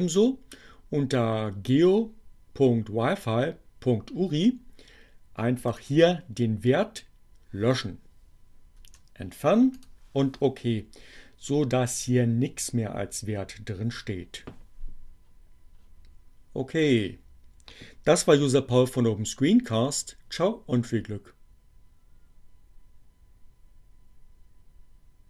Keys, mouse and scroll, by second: 5.2 click, 8.9 BackSpace, 9.7 click.